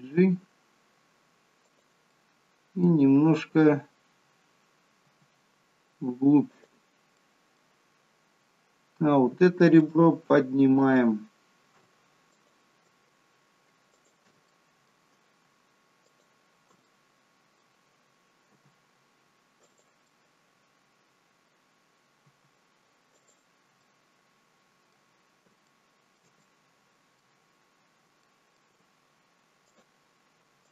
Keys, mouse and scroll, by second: 2.0 middle click, 4.9 g, 7.1 middle click, 10.7 alt+shift+click, 12.2 click, 13.8 alt+shift+click, 14.4 middle click, 16.0 alt+shift+click, 16.8 middle click, 18.5 g, 20.0 middle click, 22.1 g, 23.7 middle click, 25.1 scroll down 2, 25.6 shift+middle click, 26.3 middle click, 27.7-28.0 scroll up 2, 28.2 middle click, 29.6 click, 30.6 click.